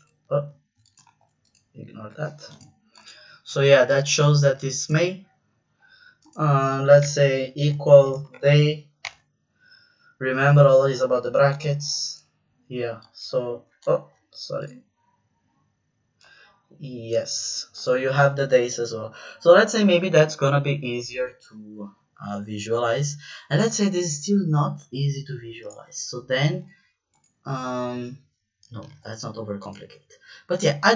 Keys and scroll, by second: 0.5 ctrl+c, 1.0 v, 7.0-9.0 typing, 11.5 Return, 13.8 ctrl+z, 28.8 z.